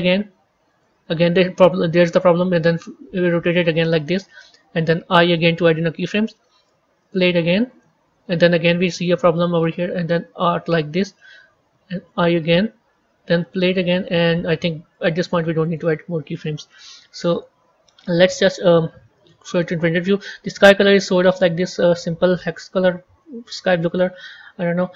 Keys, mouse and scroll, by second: 2.8 r, 5.3 i, 7.0-9.3 drag, 9.3 r, 12.0 i, 13.4-19.2 drag, 19.2 z, 22.5 click, 24.5 click.